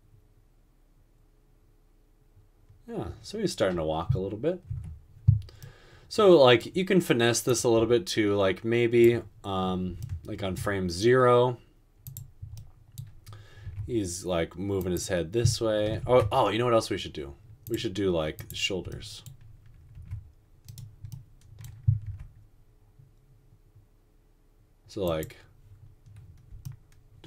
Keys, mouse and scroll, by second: 4.9 space, 13.9 r, 16.1 ctrl+z, 20.2 r, 22.1 typing.